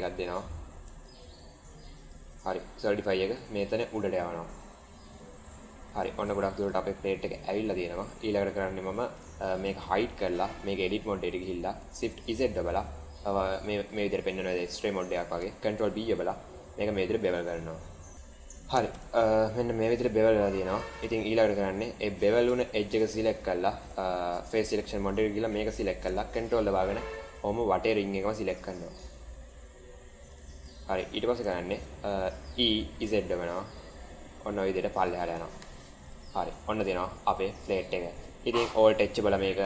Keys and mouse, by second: 1.1 shift+click, 2.8-3.3 drag, 5.5 shift+middle drag, 6.2-7.1 right drag, 7.3-7.8 middle drag, 8.1-8.4 shift+middle drag, 9.7 h, 10.1 click, 10.5 Tab, 12.2 shift+z, 14.4 middle click, 15.6 ctrl+b, 18.1 Tab, 18.9 shift+z, 19.2-20.9 middle drag, 20.9 shift+z, 22.4 Tab, 24.4 3, 24.9 click, 26.3 ctrl+click, 28.9 ctrl+click, 30.2 ctrl+click, 31.7 shift+z, 33.6 e, 35.5 Tab, 36.0 drag, 36.4-37.8 middle drag, 38.8 alt+h.